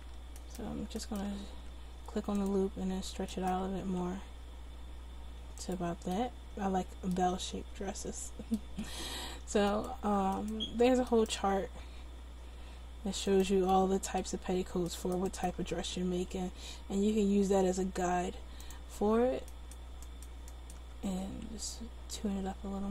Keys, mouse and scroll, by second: 1.6 s, 4.0 s, 9.7 click, 10.6-11.9 right drag, 11.9 s, 13.0 middle click, 16.7 s, 19.6-21.3 right drag, 21.3 s.